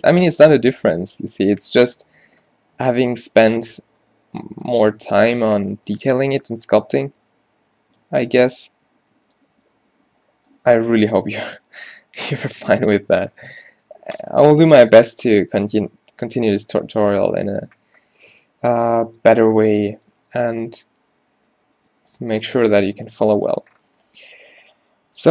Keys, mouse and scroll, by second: 2.3 Tab, 13.5 a, 14.3 click, 15.0 shift+c.